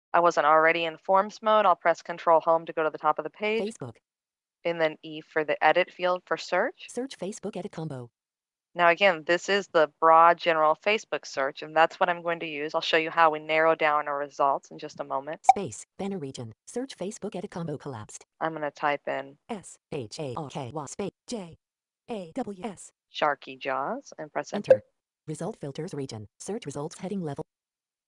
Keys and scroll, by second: 2.4 ctrl+Home, 5.9 e.